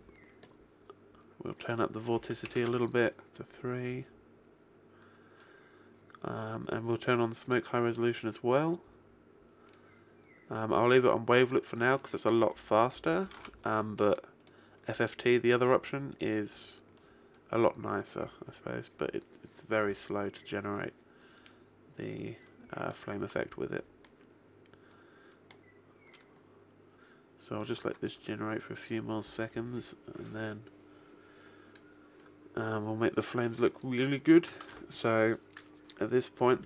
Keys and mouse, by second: 1.6 click, 6.4-9.2 drag, 9.7 click, 12.4 click, 13.3 alt+a, 15.0-17.6 drag, 35.9 alt+a.